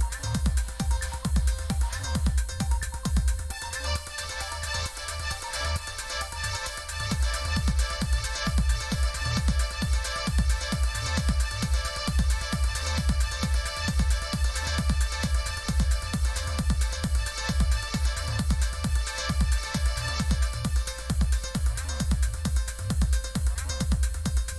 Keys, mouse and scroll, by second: 4.3 click, 9.0 click, 9.5 click, 11.8-13.7 scroll up 3, 14.3 click, 17.8 click, 18.8-22.1 scroll up 4, 22.1 scroll up 1, 23.6 click, 23.9 click.